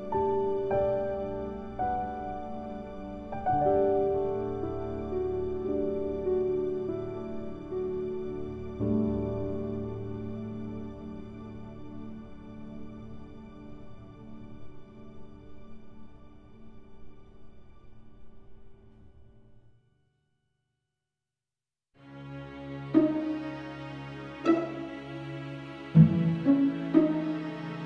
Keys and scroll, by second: 2.7 ctrl+z.